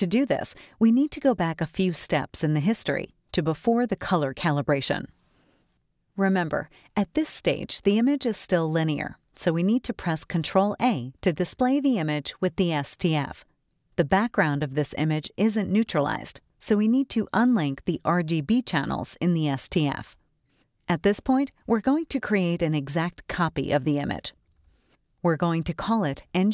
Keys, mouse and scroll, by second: 0.5 click, 2.0 click, 4.9 click, 10.9 ctrl+a, 17.6 click, 18.9 click, 22.9-24.5 drag, 25.9 click.